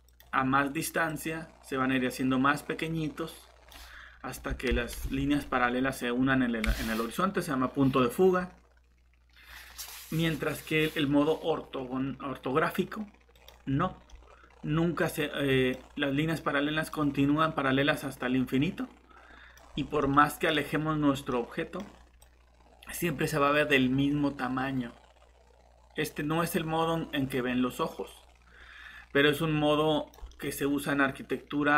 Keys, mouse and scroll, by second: 4.7 ctrl+z, 14.1 middle click, 19.6 scroll down 1, 20.0 middle click, 22.2 click, 30.3 middle click.